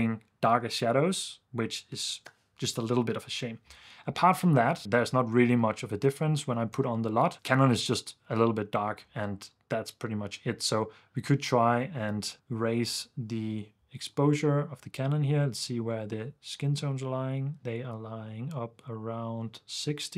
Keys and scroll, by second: 5.3 super+d, 6.9 super+d, 7.4 super+f, 9.1 super+s.